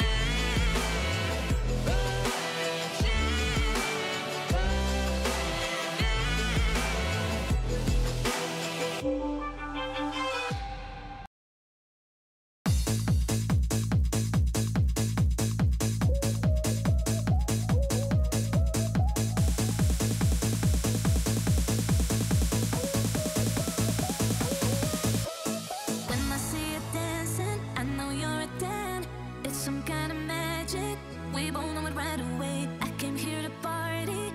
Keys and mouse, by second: 0.0 click, 1.6-2.1 drag, 2.3-4.4 drag, 4.6 click, 5.5 click, 8.0 click, 8.5 KP_7, 10.1 shift+click, 10.5 shift+d, 11.2 r, 12.4-14.4 typing, 15.5 s, 16.3 s, 18.8 click, 19.3 drag, 19.8 click, 20.2 shift+middle click, 20.9-22.0 typing, 23.4 x, 23.4 x, 23.6 x, 23.6 g, 24.6 x, 24.6 x, 24.7 x, 25.1 click, 25.6 click, 26.8 shift+click, 27.8 click, 28.3-29.3 drag, 30.2-32.3 drag, 33.0-34.3 drag.